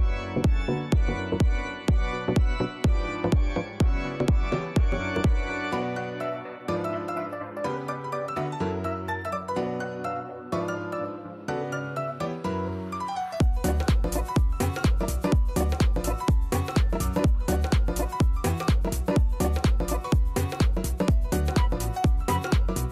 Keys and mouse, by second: 0.2-1.2 typing, 3.2 click, 4.7 g, 5.4 shift+Right, 8.0 click, 8.6 click, 9.3 click, 10.4 click, 10.8 alt+click, 11.2 alt+middle click, 11.4 alt+right click, 11.5 alt+click, 12.3 alt+middle click, 12.5 alt+right click, 13.0 click, 14.1 click, 14.3 click, 14.7 click, 16.1 click, 19.8 click.